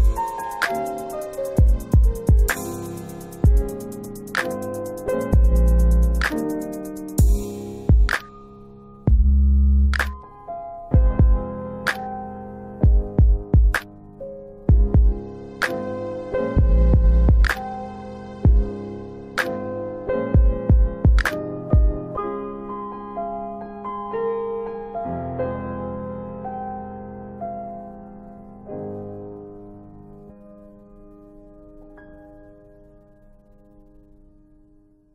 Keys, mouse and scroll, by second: 0.1 double click, 1.6 middle click, 2.0-2.5 scroll up 1, 2.5 middle click, 4.5 click, 5.3 double click, 8.5 ctrl+z, 9.9 ctrl+z, 10.4 middle click, 10.5 double middle click, 10.5 scroll down 1, 11.2 click, 12.1 scroll up 1, 13.7 click, 16.7 click, 16.8 click, 19.1 click, 22.3 middle click, 23.2 middle click, 26.5 click, 28.0 click, 29.6 middle click, 30.5 click, 33.5 click.